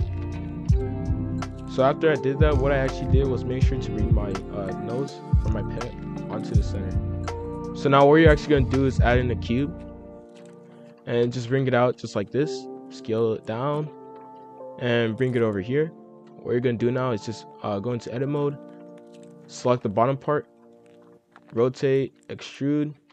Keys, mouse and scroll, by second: 0.6 z, 1.6 F2, 7.3 F3, 8.2-8.6 scroll up 1, 8.6-9.0 scroll down 1, 9.0 shift+a, 10.7 scroll down 1, 11.0 KP_1, 11.1 KP_5, 11.3 KP_7, 11.8 g, 12.9-14.4 typing, 14.1 scroll up 2, 15.5-16.1 scroll up 1, 16.2-17.2 drag, 17.2-18.0 scroll up 1, 18.0 shift+middle click, 18.4 z, 20.0 click, 20.4 click, 21.0 scroll up 2, 21.4-23.1 typing.